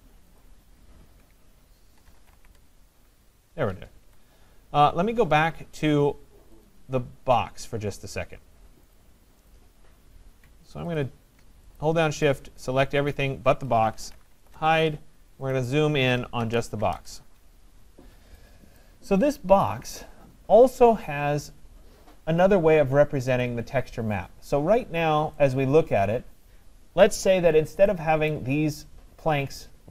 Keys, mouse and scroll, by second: 0.5 click, 1.8-2.9 typing, 4.1 Escape, 4.7 middle click, 4.8 middle click, 6.7 click, 9.0 click, 9.5 click, 11.0 ctrl+click, 11.8 shift+click, 12.3 ctrl+click, 12.7 shift+click, 13.1 shift+click, 14.4 typing, 16.8 …, 18.8 right click, 19.5 typing, 23.4 click, 27.2 right click.